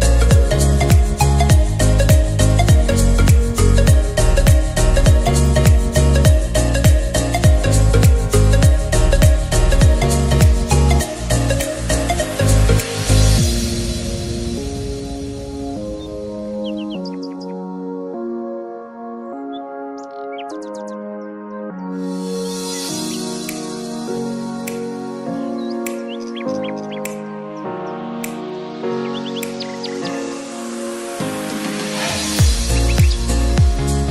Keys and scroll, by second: 0.5 e, 9.5 ctrl+t.